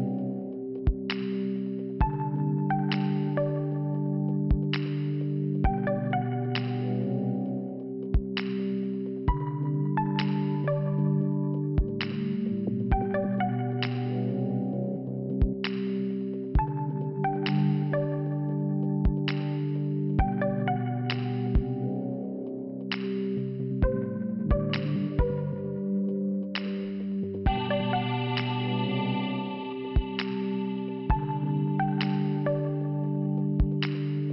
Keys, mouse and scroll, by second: 0.2 double click, 0.3 double click, 1.2 click, 1.3 click, 3.0 click, 3.3 click, 4.0 click, 4.1 click, 5.2 click, 6.2 click, 6.3 click, 8.8 click, 10.7 click, 10.7 click, 11.4 click, 12.4 click, 13.0 click, 13.1 click, 13.5 scroll up 1, 15.1 click, 16.7 click, 18.6 click, 18.7 click, 19.6 click, 19.6 click, 21.0 click, 22.7 click, 24.7 click, 24.8 click, 27.7 click, 29.6 click, 32.1 click, 32.2 click, 32.8 click, 32.9 click, 33.5 click.